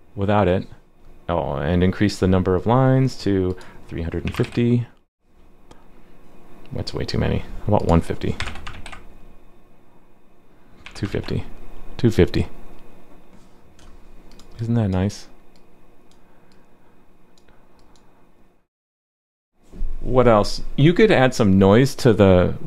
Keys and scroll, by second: 4.4 super+s, 8.7 super+s, 11.1 super+s.